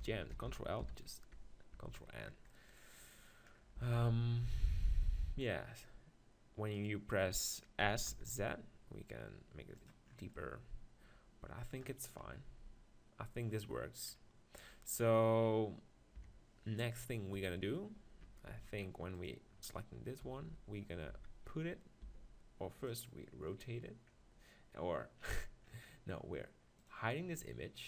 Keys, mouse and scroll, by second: 0.3 ctrl+l, 0.8 ctrl+n, 1.7 Tab, 3.8 s, 5.0 middle click, 6.8-8.7 right drag, 7.8 s, 9.8-11.8 drag, 11.8 middle click, 12.2 KP_1, 16.2 KP_7, 19.2-20.9 drag, 20.4 x, 20.9-22.0 middle drag, 21.2 z, 22.0 r, 22.8-24.7 drag, 26.8-27.8 drag.